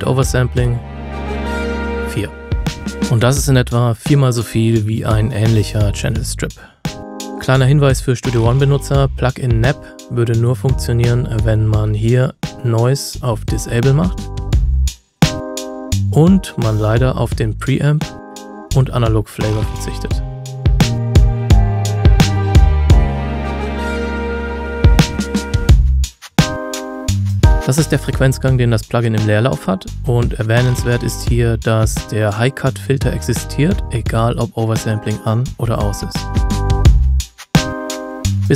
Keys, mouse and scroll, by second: 3.0 F9, 5.0 click, 11.0 click, 27.6 Tab, 34.8 click.